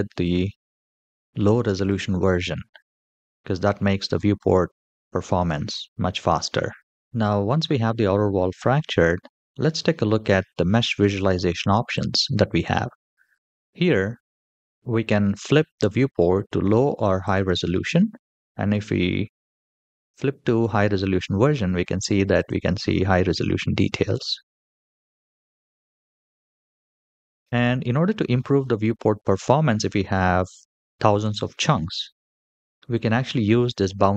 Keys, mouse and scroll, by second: 2.8 g, 4.3-4.8 middle drag, 5.2 g, 6.4-7.0 scroll down 3, 7.0 shift+middle click, 11.7 click, 17.2 click, 18.9-20.0 scroll up 3, 20.0 middle click, 21.6-22.0 scroll up 2, 22.1 click, 22.8 g, 25.4-25.8 scroll down 2, 25.9-27.0 scroll down 3, 27.0-28.1 scroll down 4, 28.1 shift+middle drag, 28.6-29.0 middle drag, 29.4 shift+middle click, 29.9 middle click.